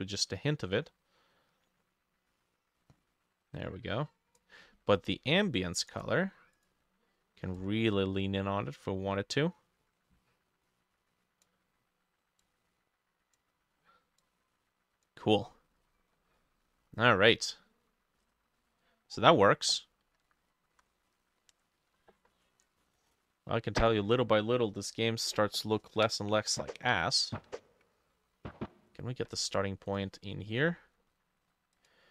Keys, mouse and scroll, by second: 15.5-16.7 scroll down 11, 15.9 middle click, 16.7 middle click, 17.5 scroll down 1, 17.8-18.6 scroll up 10, 18.6 middle click, 19.2 scroll up 1, 19.3 middle click, 19.8 middle click, 20.3 middle click, 20.8 F6, 22.5 click, 30.8-32.1 drag, 30.8 middle click.